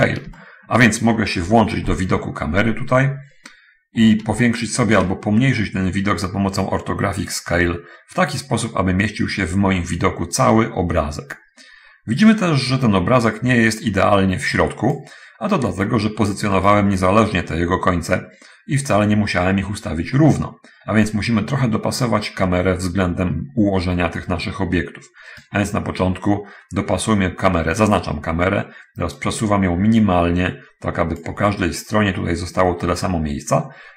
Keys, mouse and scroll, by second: 0.6 shift+middle click, 1.8 0, 2.7-3.2 scroll down 1, 3.4-3.7 scroll up 1, 3.7-4.4 scroll down 1, 4.8 shift+middle click, 7.6-15.4 drag, 16.9 right click, 25.6 right click, 29.2-31.7 drag.